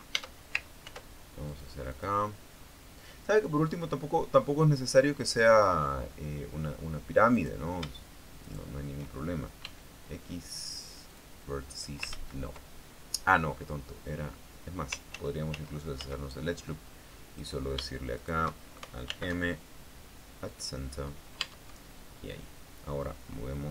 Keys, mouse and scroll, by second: 0.4 Escape, 0.8 Tab, 1.5 ctrl+r, 2.2 click, 2.6 click, 6.5 scroll up 2, 8.0 right click, 9.1 shift+right click, 10.3 x, 11.8 click, 12.8 ctrl+z, 15.8 ctrl+z, 18.1 right click, 18.9 shift+right click, 19.8 alt+m, 21.2 click, 22.1 Tab.